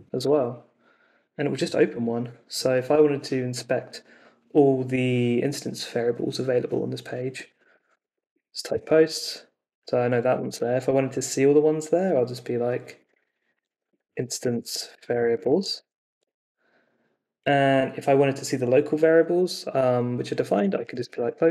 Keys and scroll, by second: 0.2 super+r, 7.3-8.8 typing, 12.7-16.2 typing, 20.3-21.5 typing.